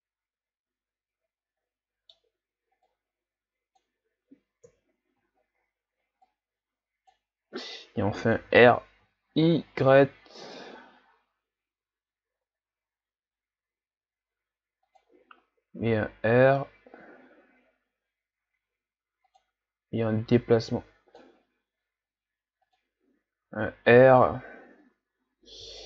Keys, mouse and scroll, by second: 2.9-4.7 drag, 4.7 KP_3, 5.4-6.1 scroll down 3, 6.1 scroll down 1, 6.2-8.4 drag, 8.4 r, 15.9 r, 20.0-21.6 drag, 21.6 s, 23.5 r.